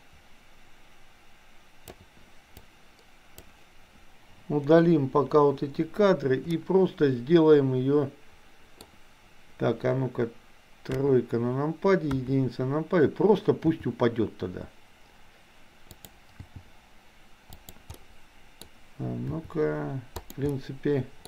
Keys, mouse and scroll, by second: 2.6-3.5 drag, 5.2 Delete, 6.5-8.9 middle drag, 10.9 KP_3, 13.7 r, 16.5 g, 17.9-18.5 scroll up 1, 18.5 scroll up 1, 19.4 r, 20.5 middle click.